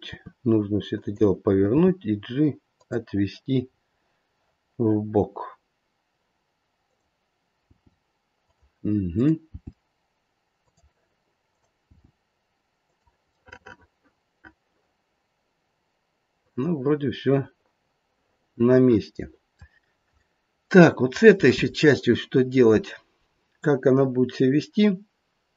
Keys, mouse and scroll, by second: 0.1 r, 1.7 g, 3.7-4.7 scroll up 2, 6.8 click, 7.6 g, 9.1 click, 9.5 g, 11.5 click, 11.9 g, 13.3 middle click, 19.8-20.2 scroll down 1, 20.2 middle click, 20.7 middle click, 21.0 middle click.